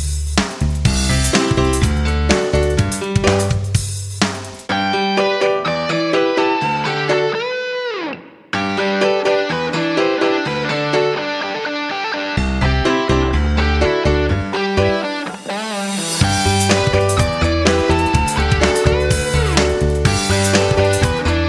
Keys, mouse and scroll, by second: 2.2 Right, 2.5 Right, 2.8 Down, 3.8 Left, 4.1 Down, 5.3 click, 14.8 click, 16.0-17.7 scroll up 1, 17.8-18.8 scroll up 1, 19.8 click.